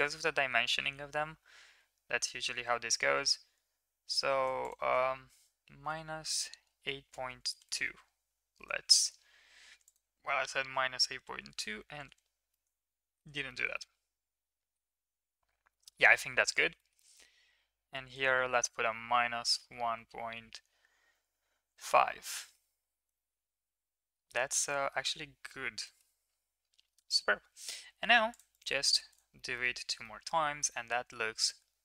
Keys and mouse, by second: 4.6-7.5 drag, 9.8-12.0 drag, 12.5-13.1 middle drag, 13.4 shift+middle drag, 13.7-14.7 middle drag, 15.7 shift+middle drag, 16.0 middle drag, 16.7 shift+middle drag, 17.0 middle drag, 18.0-21.8 drag, 22.3 middle drag, 23.1 shift+middle drag, 23.8-24.1 middle drag, 24.7 middle drag, 25.4-26.0 middle drag, 26.8 shift+middle click, 27.0 middle click, 28.3 click, 28.5 click, 29.3 middle drag, 30.0-31.8 middle drag.